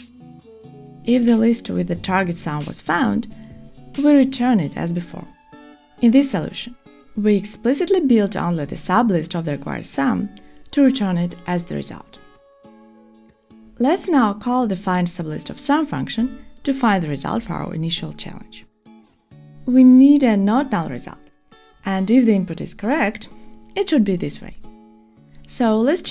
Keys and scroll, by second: 0.0 shift+super+Return, 2.1 Return, 8.8 Return, 11.1 Escape, 18.3 Return, 19.4 Return, 21.0 Return.